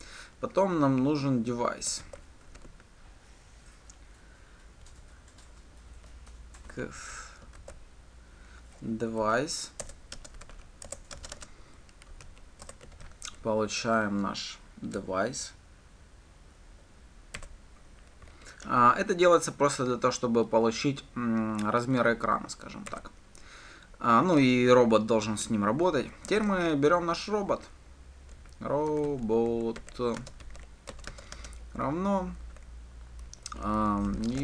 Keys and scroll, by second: 10.1 Return, 18.1 Return, 31.2 Return.